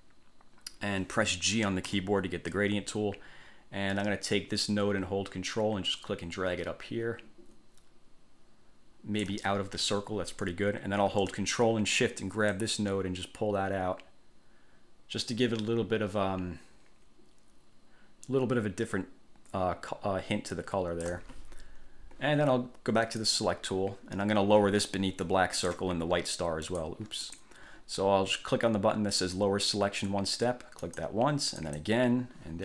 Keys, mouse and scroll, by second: 2.0 g, 4.4-9.6 ctrl+drag, 12.7-21.4 ctrl+shift+drag, 23.4 click, 25.8 right click, 26.8 click, 27.4 click, 31.0 click, 31.8 click.